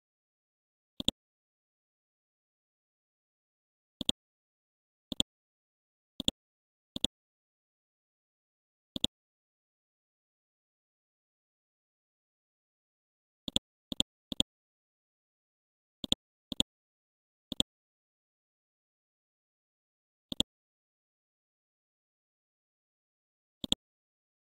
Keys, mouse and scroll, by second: 3.0-3.5 scroll down 1, 4.0 click, 7.8 scroll up 1, 9.0-11.0 drag, 11.0 scroll up 1, 12.0 Home, 13.4-19.1 drag, 21.0 Home, 22.0 scroll up 1, 22.6 ctrl+g, 23.6-24.4 drag.